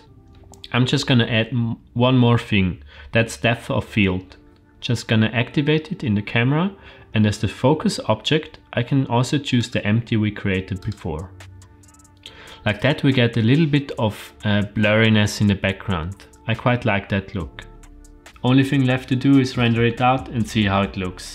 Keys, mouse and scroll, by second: 0.0 click, 4.5 click, 9.5-11.1 drag.